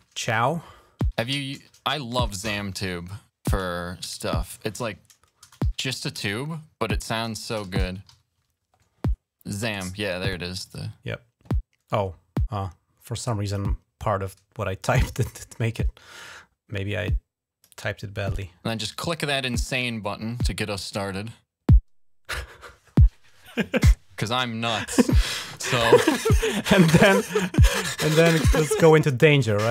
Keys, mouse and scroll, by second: 0.5-1.8 typing, 4.6 ctrl+a, 5.3-8.7 typing, 10.3 click, 10.6 click, 13.2 click, 16.0-17.7 drag, 20.6 click, 28.0-29.7 drag.